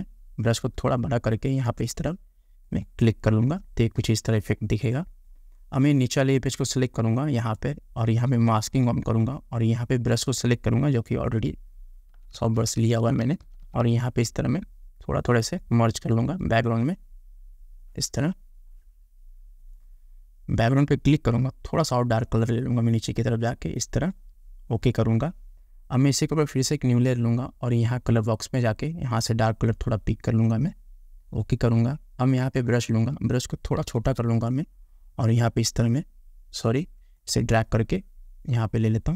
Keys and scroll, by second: 12.4 [, 34.1 [.